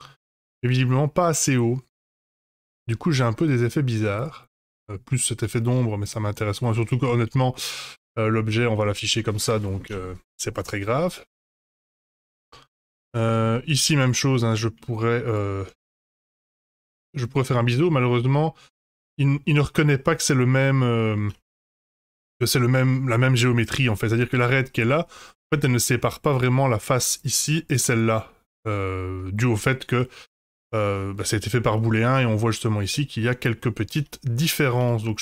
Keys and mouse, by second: 1.6-2.7 middle drag, 3.5 Tab, 4.6 middle click, 6.3 middle click, 7.3 shift+middle click, 8.5 shift+middle click, 10.1 Tab, 10.9-11.9 middle drag, 12.4 shift+middle drag, 13.1 Tab, 13.3 middle click, 13.6 Tab, 14.3 middle click, 16.2 ctrl+b, 17.4 ctrl+z, 17.7 click, 20.9 middle click, 21.5 Tab, 22.1 Tab, 23.5 middle click, 24.2 click, 27.0 3, 27.1 click, 28.1 middle click, 29.6 shift+middle click, 30.7 middle click, 31.7 middle click, 32.9 middle click, 33.4 shift+click, 34.2 Tab, 34.8 Tab.